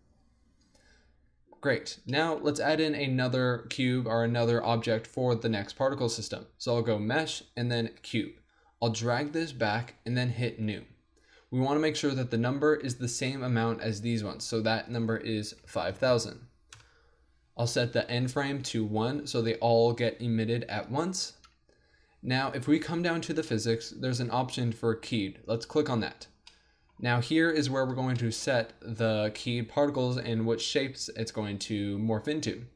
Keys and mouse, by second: 0.9-2.2 middle drag, 5.9 shift+a, 9.0 click, 9.5 click, 10.8-14.0 drag, 14.0 middle click, 14.9-16.0 drag, 16.0 KP_0, 16.5 click, 20.2-25.5 middle drag, 25.5-26.5 drag, 26.5 middle click.